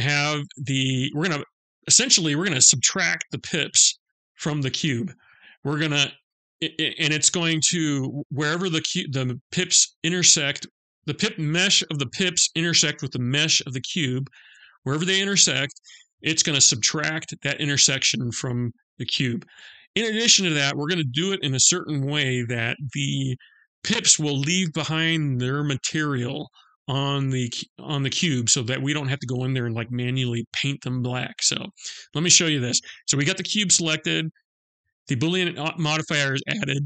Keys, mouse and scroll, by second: 32.4 click.